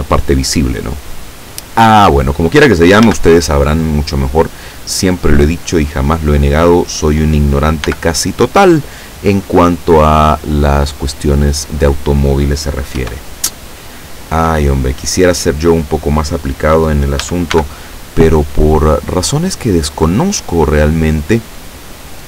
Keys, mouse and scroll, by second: 3.1 a, 7.9 b, 8.5-11.0 drag, 13.0 e, 15.7 click, 17.2 a, 17.6 b, 18.0 click, 19.4-21.5 drag.